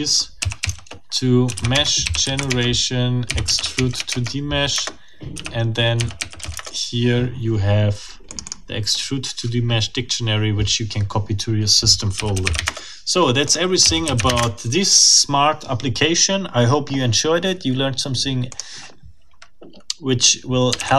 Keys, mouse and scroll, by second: 0.0-6.7 typing, 4.7 Return, 8.3 click, 11.9-14.8 typing, 13.5 click, 18.5 click, 20.8 ctrl+c.